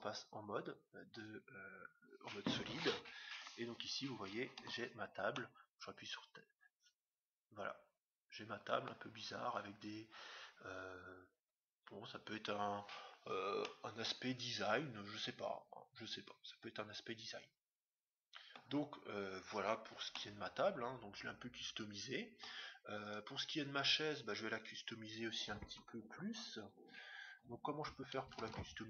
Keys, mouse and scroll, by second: 0.3 scroll up 1, 4.6 Tab, 5.3-7.3 middle drag, 12.0-12.7 scroll down 2, 12.1 middle click, 12.7 scroll up 1, 12.8-15.3 middle drag, 19.8-21.8 middle drag, 23.0-24.7 right drag, 25.6 Tab, 26.6 middle click, 27.1-28.3 scroll down 1, 28.3 ctrl+Tab, 28.3-28.8 scroll down 1.